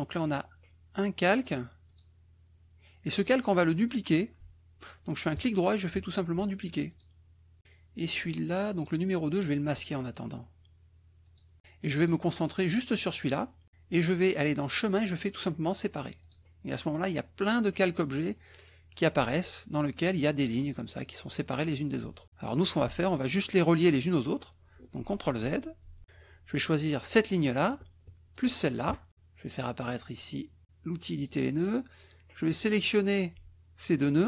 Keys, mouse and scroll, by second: 1.4 click, 1.9 click, 5.4 right click, 6.9 click, 7.6 click, 8.8 click, 11.2 click, 11.9 click, 14.8 click, 16.2 click, 18.8 click, 19.8-20.4 drag, 21.1-21.6 drag, 22.6-23.1 drag, 25.0 ctrl+z, 26.0 ctrl+click, 27.0 click, 28.3 shift+click, 31.1 click, 32.6-34.2 drag.